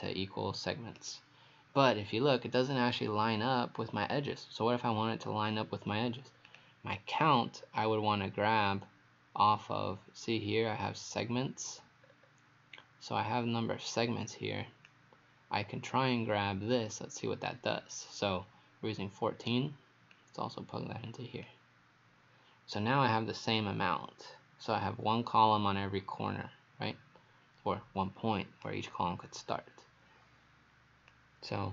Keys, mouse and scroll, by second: 6.5 click, 12.1 scroll up 2, 14.9 click, 22.8 right click, 31.1 click.